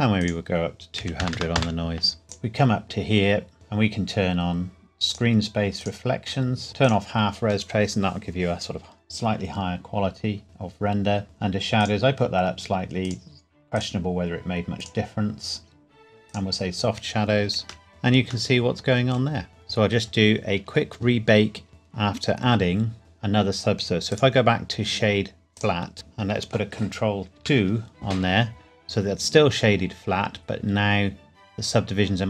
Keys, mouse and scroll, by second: 0.2 click, 1.0 KP_2, 1.2 KP_0, 1.6 KP_Enter, 3.5 click, 5.8 click, 6.8 click, 11.2-11.8 scroll down 1, 11.8 click, 17.9 middle click, 21.7 space, 23.0 click, 24.1 right click, 25.5 click, 25.9 middle click, 27.4 ctrl+2, 29.1 scroll up 1.